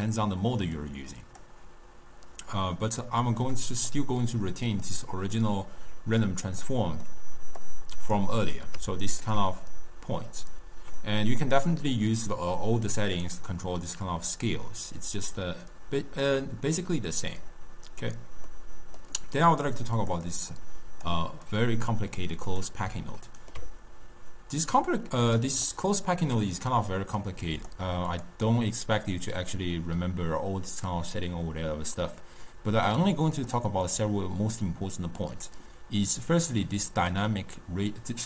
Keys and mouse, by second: 0.8-3.5 drag, 3.5-7.7 middle drag, 7.7 click, 9.0-12.3 ctrl+middle drag, 12.3-15.3 drag, 17.0-19.5 middle drag, 19.5 click, 20.1-21.6 drag, 23.3-24.7 ctrl+middle drag, 24.7-25.7 drag, 25.7-27.3 middle drag, 27.3-31.3 drag, 34.7-35.4 middle drag, 35.4 click.